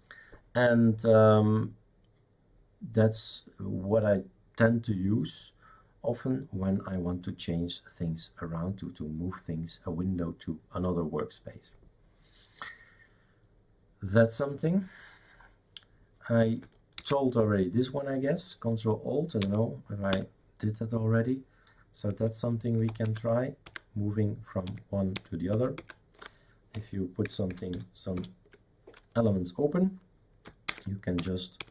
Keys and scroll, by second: 17.0 ctrl+alt+Right, 19.4 ctrl+alt+Left, 20.1 ctrl+alt+Left, 22.1 ctrl+alt+Up, 22.8 ctrl+alt+Down, 23.0 ctrl+alt+Right, 23.7 ctrl+alt+Right, 24.9 ctrl+alt+Left, 25.2 ctrl+alt+Left, 25.5 ctrl+alt+Right, 25.8 ctrl+alt+Right, 27.3 super+F2, 27.5 super+F3, 27.7 super+F4, 28.2 super+F5, 30.7 ctrl+alt+Left, 31.2 ctrl+alt+Left, 31.6 ctrl+alt+Left.